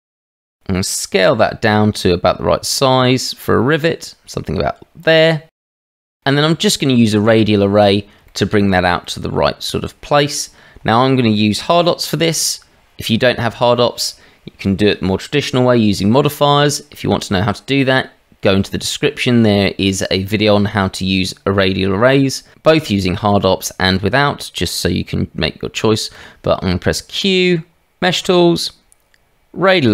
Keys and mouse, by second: 0.0 shift+a, 1.2 s, 5.5 middle click, 6.2 shift+middle click, 7.2 middle click, 9.1-10.5 middle drag, 26.1 q.